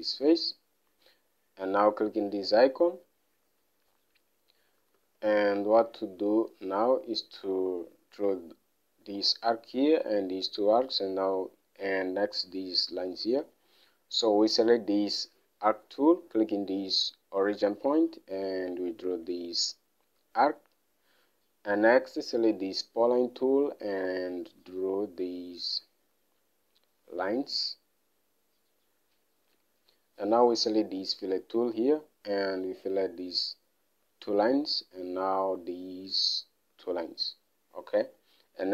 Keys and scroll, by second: 5.4 alt+Tab, 13.8 alt+Tab.